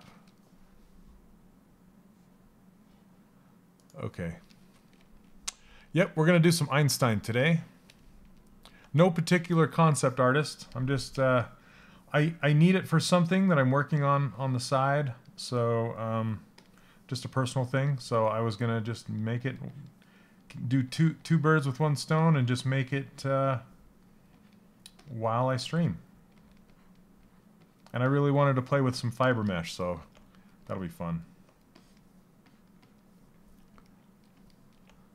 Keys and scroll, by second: 25.2 s, 25.9 s.